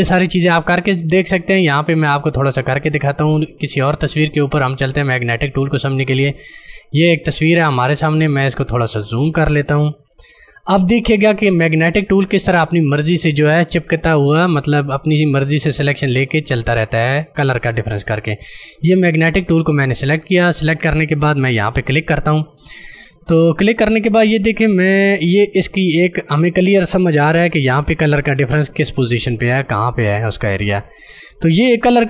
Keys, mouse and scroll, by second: 1.8 click, 5.0 click, 8.3 click, 10.2 space, 10.4 click, 10.7 space, 11.8 click, 19.4 click, 22.2 click, 28.0 ctrl+alt+space, 30.0 ctrl+click, 30.1 ctrl+space, 30.5 ctrl+click, 30.7 ctrl+space.